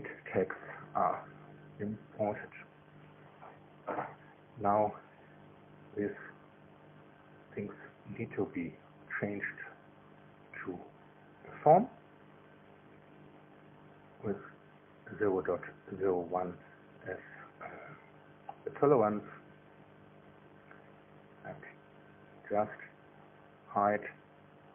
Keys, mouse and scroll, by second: 1.4 click, 8.7 click, 10.3 click, 11.6 KP_0, 11.8 KP_Decimal, 12.1 KP_0, 12.4 KP_1, 12.6 KP_Enter, 14.3 click, 16.0 click, 18.1 click, 19.6 KP_0, 19.8 KP_Decimal, 20.0 KP_0, 20.3 KP_1, 20.5 KP_Enter, 22.4 click, 22.8 space, 23.4 click, 23.7 space.